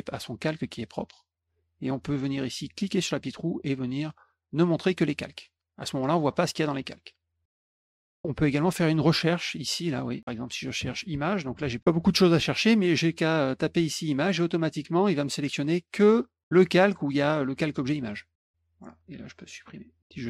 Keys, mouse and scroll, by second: 0.0 click, 0.7 click, 1.2 click, 2.9 click, 4.5 click, 5.0 click, 5.8 click, 6.3 click, 6.7 click, 7.0 click, 7.5 click, 8.0 click, 8.3 click, 11.2-12.2 typing, 13.6 click, 13.8 click, 17.1 click, 19.5 click, 20.0 click.